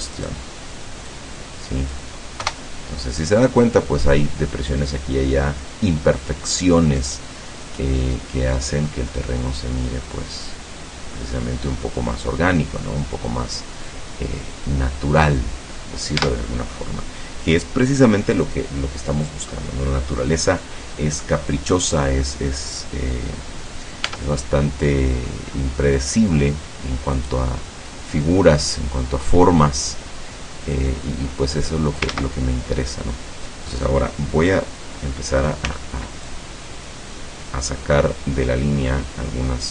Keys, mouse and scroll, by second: 0.2 right click, 1.2-2.2 drag, 2.5 KP_0, 7.0 right click, 7.7-11.0 drag, 11.0-12.0 scroll up 1, 16.3 Tab, 24.1 Tab, 24.7 click, 24.8 middle click, 27.2 right click, 28.1 middle click, 29.6-32.2 drag, 32.1 ctrl+z, 33.1 middle click, 35.0 middle click, 35.8 c, 36.4-39.7 drag.